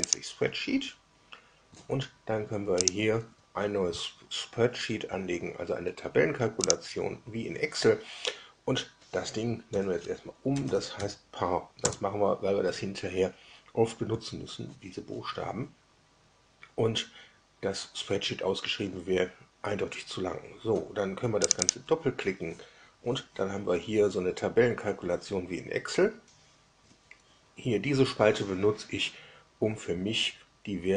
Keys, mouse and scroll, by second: 0.0 click, 2.8 click, 6.6 click, 9.6 F2, 10.2-11.4 typing, 11.8 Return, 21.4 click.